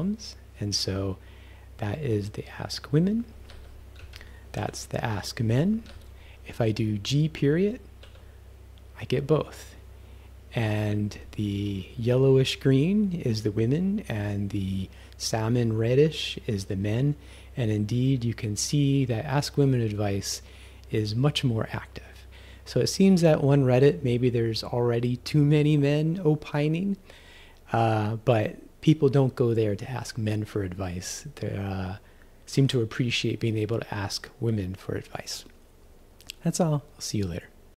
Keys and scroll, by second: 3.5 q, 4.0 Right, 4.6 ·, 5.9 q, 7.6 g, 9.1 ..